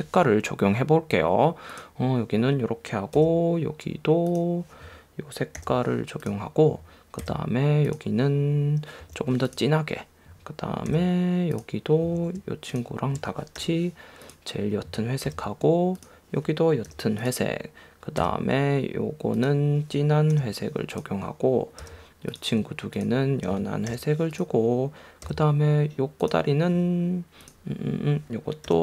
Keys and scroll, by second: 3.3 v, 7.4 v, 9.2 i, 11.1 v.